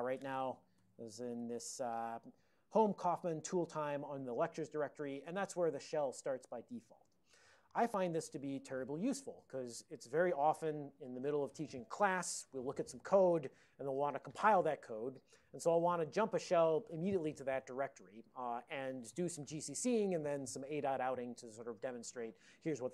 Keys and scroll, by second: 0.7-1.5 typing, 1.8 Return.